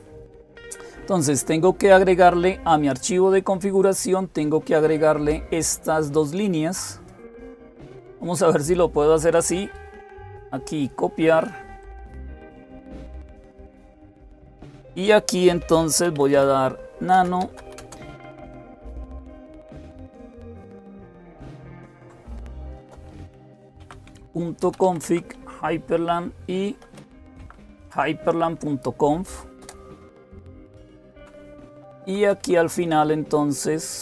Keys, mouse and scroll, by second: 3.7-7.7 drag, 9.3-11.6 right drag, 11.6 click, 13.7 click, 15.8-17.9 typing, 21.6-24.9 typing, 26.6-26.9 typing, 27.2 Tab, 29.4 Return, 30.7 Down, 30.9 Down, 31.5 Page_Down, 31.6 Page_Down, 31.8 Page_Down, 32.0 Page_Down, 32.2 Page_Down, 32.9 Down, 32.9 Page_Down, 33.5-34.0 Down.